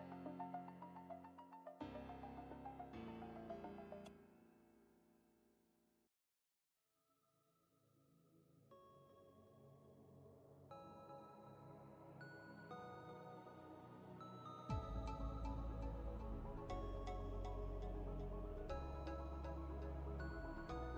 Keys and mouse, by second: 1.8 click, 2.4-6.1 shift+click, 7.2 ctrl+space, 7.4-8.3 ctrl+click, 7.7 ctrl+space, 8.7 v, 9.8-13.3 drag, 14.1 ctrl+space, 14.1-15.3 ctrl+click, 14.7 ctrl+space, 15.3 click, 19.5-20.8 drag.